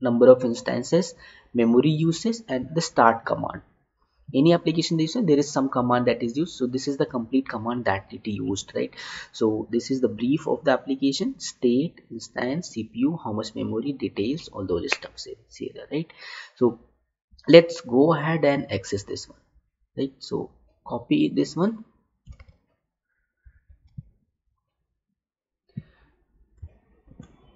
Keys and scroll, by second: 22.7 alt+Tab, 27.0 ctrl+v.